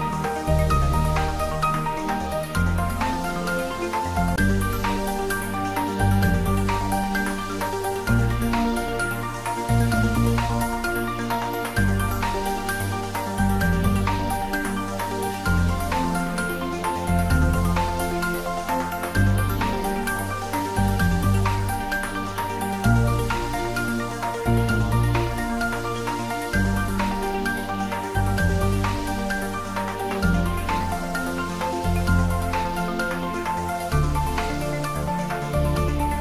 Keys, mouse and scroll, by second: 0.7 middle click, 1.5 scroll up 1, 2.8 e, 5.2 click, 5.5-5.8 scroll up 1, 6.1-9.2 middle drag, 9.2 click, 13.8 e, 14.8 click, 15.1 scroll up 1, 15.5-17.0 middle drag, 17.0 ctrl+b, 19.3 click, 19.9 Tab, 20.3 scroll down 1, 23.0-25.9 middle drag, 25.9 shift+z, 26.6 scroll down 1, 28.1 click, 28.8-31.5 scroll up 1.